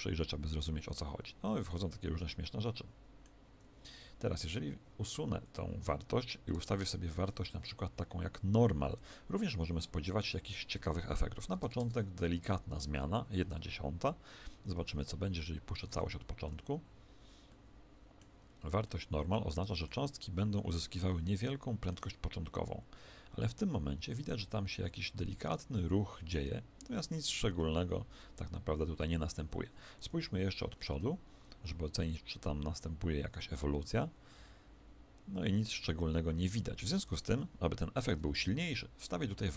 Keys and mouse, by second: 3.4 Escape, 5.4 click, 14.7 shift+Left, 15.8 alt+a, 17.4-23.2 middle drag, 29.4 Escape, 30.1 KP_1, 30.8 alt+a, 36.7 Escape, 37.2-39.4 middle drag, 39.4 click.